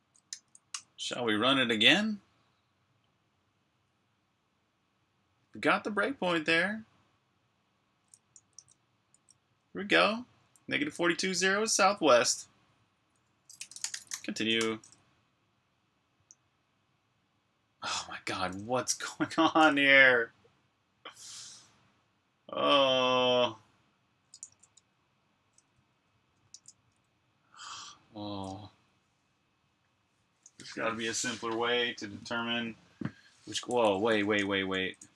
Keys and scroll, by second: 0.2-0.5 typing, 8.5 super+Tab, 13.2-14.4 typing, 14.5 Return, 24.4 super+Tab, 25.7-26.0 typing, 26.4 super+q, 28.8 l, 34.5 BackSpace.